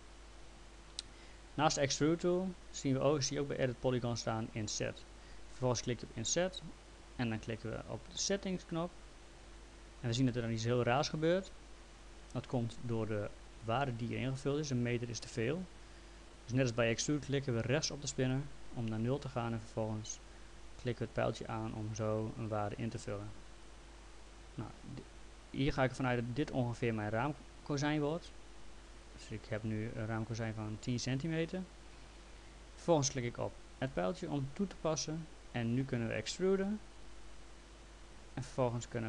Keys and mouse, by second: 8.7 click, 12.7 click, 18.2 right click, 20.2 click, 33.8 click, 36.6 click.